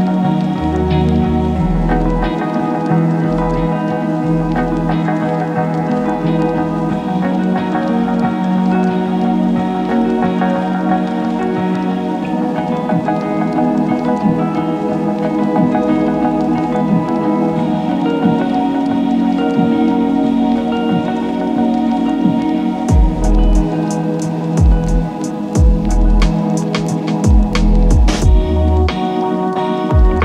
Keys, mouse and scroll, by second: 0.8 click, 0.9-5.6 drag, 7.3-10.3 drag, 17.3 click, 27.5-30.2 drag.